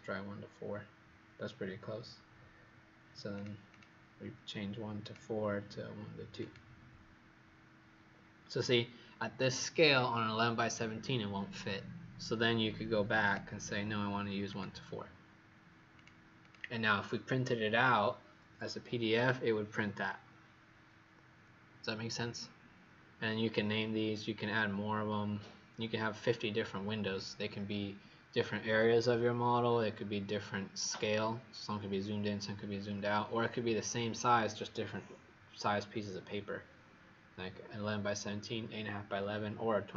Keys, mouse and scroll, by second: 3.7 click, 5.0 click, 16.4 click.